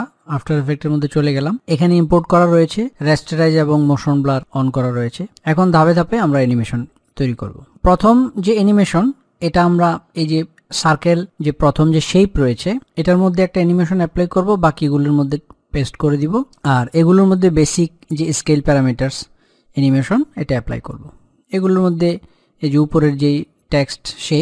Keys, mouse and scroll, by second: 0.0 click, 7.9 middle click, 8.1 click.